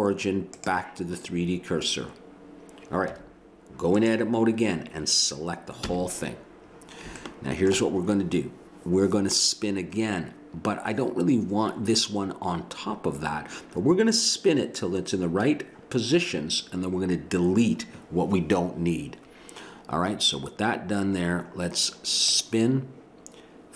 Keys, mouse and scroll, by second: 1.2 middle click, 3.1 Tab, 5.8 a, 22.3-23.7 drag.